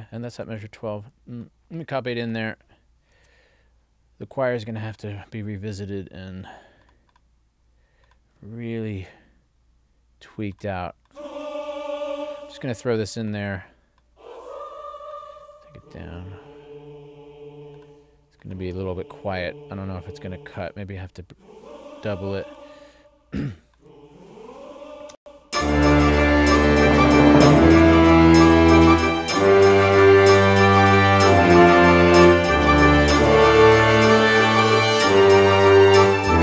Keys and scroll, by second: 3.2 super+c, 9.1 super+v, 15.8 alt+shift+Down, 25.2 space.